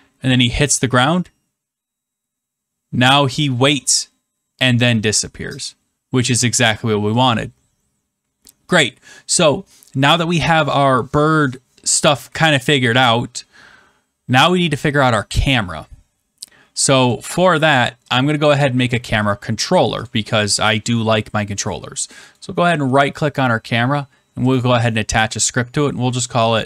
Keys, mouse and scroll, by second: 7.1 click, 18.1 click, 20.0 click, 22.3 right click, 24.5 click.